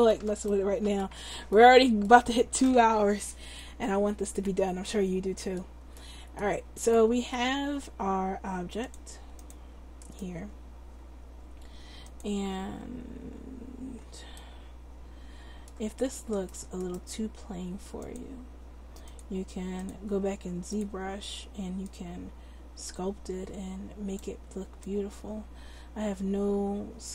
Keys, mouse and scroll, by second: 2.2 Tab, 9.6 click, 11.4 click, 19.2 click, 22.9-27.1 drag.